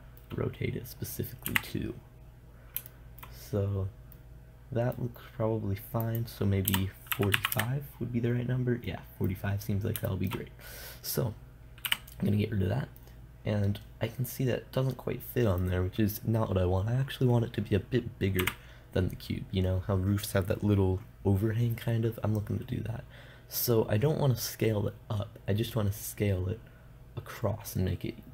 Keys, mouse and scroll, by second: 1.9 KP_7, 5.7 middle click, 8.9-11.0 middle drag, 12.3 n, 13.1-15.5 middle drag, 18.8 KP_0.